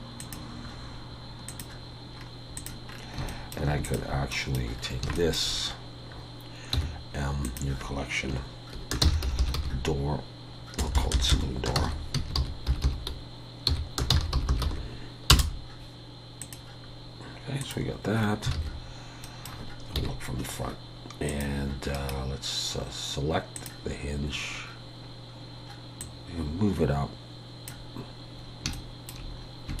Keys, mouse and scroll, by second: 1.5 click, 2.2-3.0 scroll down 6, 2.6 click, 3.2 shift+scroll up 1, 3.3 shift+middle click, 3.8 shift+click, 4.3 middle click, 4.7 scroll down 1, 5.2 shift+middle click, 6.7 m, 9.4 o, 11.0 BackSpace, 12.9 o, 18.1 click, 18.1-18.6 scroll down 4, 18.5 alt+a, 19.2 middle click, 20.0 KP_1, 22.0 right click, 24.3-25.0 scroll up 1, 25.0-26.0 scroll up 1, 26.0 click, 28.4 scroll up 2, 28.7 shift+middle click, 29.3-29.8 scroll up 2.